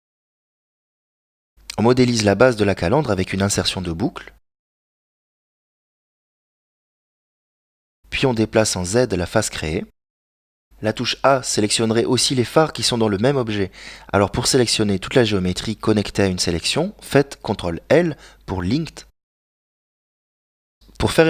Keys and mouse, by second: 1.3 right click, 2.5 ctrl+r, 6.2 right click, 7.1 ctrl+Tab, 7.9 right click, 8.8 g, 12.3 ctrl+l, 13.1 g, 15.5 middle click, 17.0 g, 20.8 right click.